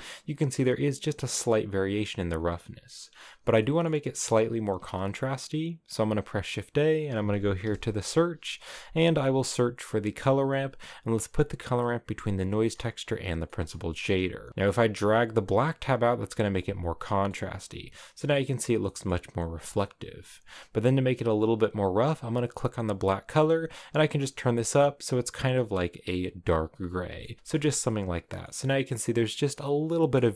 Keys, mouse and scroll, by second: 2.4 click, 12.6-13.4 scroll up 1, 13.4-14.8 middle drag, 14.8-16.5 drag, 16.5 middle click, 17.3 scroll up 2, 18.1-19.8 middle drag, 19.8-23.4 drag, 27.2 middle click, 27.9 middle click, 30.1 middle click.